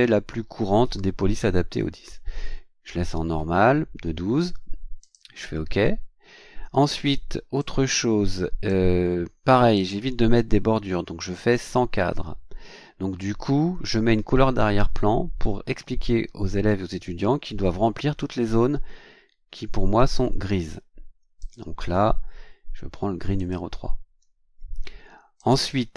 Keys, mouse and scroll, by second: 5.0 click, 7.6-8.9 drag, 9.7 click, 11.5 click, 21.4 click, 23.4 click, 25.4 click.